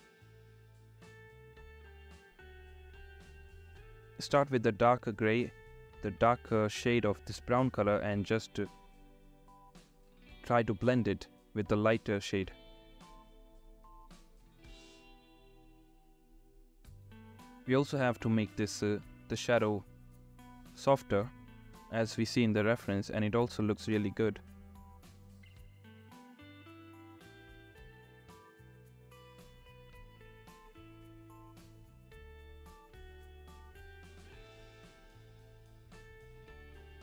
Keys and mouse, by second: 0.0 [, 0.3 [, 1.4 [, 1.5 ctrl+z, 2.3 ], 2.6 ], 2.6 ], 6.5 ], 7.0 [, 8.1 ctrl+z, 8.4 ], 8.5 ], 8.7 ], 9.5 ], 10.9-13.5 typing, 13.4 ctrl+z, 17.0 ctrl+z, 17.1-19.4 typing, 19.2 ctrl+z, 20.0 ctrl+z, 21.2 click, 22.2 click, 22.4-24.4 typing, 24.3 ctrl+z, 26.7 ctrl+z, 26.7 ], 27.4 ctrl+z, 27.5 [, 27.6 [, 27.7 [, 28.3 ctrl+z, 29.4 click, 30.3 ], 30.4 ], 30.5 ], 30.6 click, 30.6 ], 31.3 ctrl+z, 33.3 ctrl+z, 33.4 ], 34.0 ], 34.5 ctrl+z, 35.3 [, 35.4 [, 36.1 ctrl+z, 36.1 ].